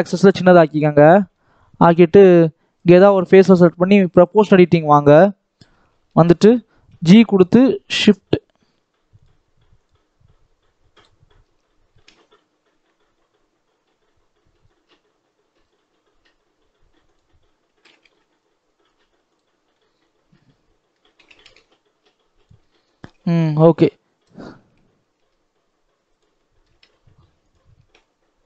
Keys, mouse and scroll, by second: 0.7 scroll up 1, 0.9 middle click, 1.4-2.7 scroll up 1, 2.7-4.2 drag, 5.0 KP_7, 5.6 scroll down 1, 5.8-6.8 shift+middle drag, 6.8 g, 11.8 s, 17.7 s, 19.4 scroll down 3, 19.6-21.1 middle drag, 21.1 a, 21.2 s, 22.5 middle click, 22.9-23.2 scroll up 2, 23.2 Tab, 23.5-24.5 middle drag, 24.5 Tab, 25.1 s, 26.2 middle click, 26.6 s, 27.7 Tab, 27.9 middle click.